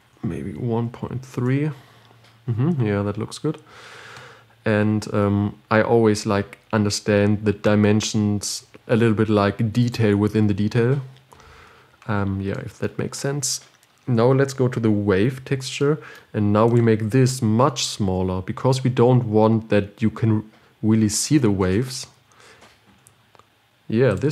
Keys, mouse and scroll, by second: 5.4-6.1 scroll down 3, 6.7-7.5 scroll up 3, 22.2-24.3 drag.